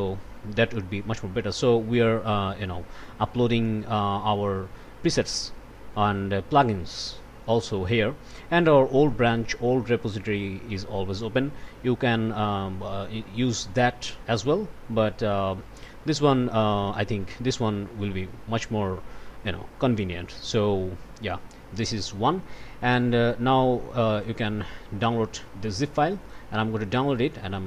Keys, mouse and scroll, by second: 0.0 click, 1.4 click, 3.3 click, 8.3 click, 15.1 click, 17.0 click, 21.4 scroll down 2, 22.2 scroll up 2, 24.1 click, 26.2 click.